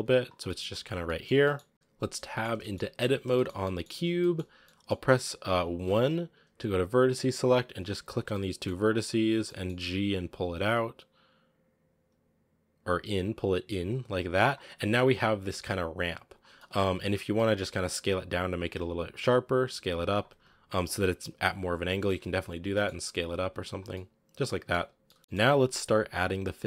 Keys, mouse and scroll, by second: 0.3 g, 0.9 middle click, 1.2 g, 1.7-2.2 scroll up 1, 2.2-2.6 shift+middle drag, 2.6-2.9 shift+scroll up 3, 2.9 Tab, 3.2-4.3 shift+middle drag, 4.3 scroll up 2, 4.5-5.7 middle drag, 5.7 1, 7.3 right click, 8.0 shift+right click, 8.2 middle click, 8.9 scroll up 1, 9.2 g, 14.6 scroll down 2, 14.8 Tab, 15.2-15.7 scroll down 1, 15.7 s, 16.3 scroll down 1, 16.4-17.1 middle drag, 17.1 s, 18.4 s, 20.2 s, 21.3-21.8 scroll up 2, 21.8 s, 22.2-22.5 scroll down 3, 22.5 g, 23.3 s, 23.8-24.9 middle drag, 24.9 g, 25.2-25.9 shift+middle drag, 25.9-26.5 scroll down 1, 26.5 scroll down 1.